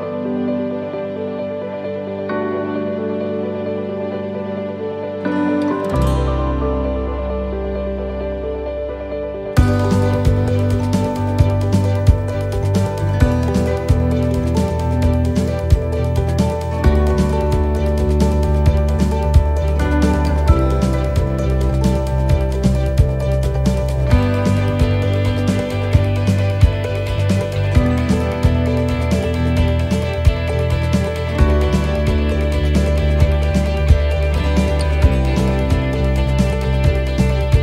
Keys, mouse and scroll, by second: 0.6 scroll down 1, 0.9 middle click, 1.9 shift+middle click, 2.6 middle click, 4.0 shift+middle click, 4.5 middle click, 4.8 scroll down 2, 5.3 shift+middle click, 5.8 middle click, 6.3 shift+middle click, 7.1 shift+middle click, 7.5 shift+middle click, 9.2 shift+middle click, 9.8 shift+middle click, 10.7-11.4 scroll down 1, 11.4 right click, 11.4 scroll down 1, 13.4 shift+d, 15.0 click, 15.8 shift+middle click, 16.4-16.8 scroll up 2, 17.6 click, 18.7 scroll up 2, 19.3 middle click, 23.6 scroll down 4, 24.0 shift+middle click, 24.3 scroll up 2, 25.2 shift+middle click, 25.7 scroll down 1, 26.2 middle click, 26.5 shift+middle click, 26.9-27.4 scroll up 2, 27.4 shift+middle click, 27.8 scroll down 1, 28.0 middle click, 30.4 shift+middle click, 32.7 scroll down 2, 33.1 shift+middle click, 33.4 shift+scroll down 2, 33.9 shift+middle click, 34.3 scroll down 2, 34.8 shift+middle click, 35.2 scroll up 3, 35.4 shift+middle click, 35.8 scroll down 2, 36.2 shift+middle click, 36.9 scroll up 2, 37.3 shift+middle click.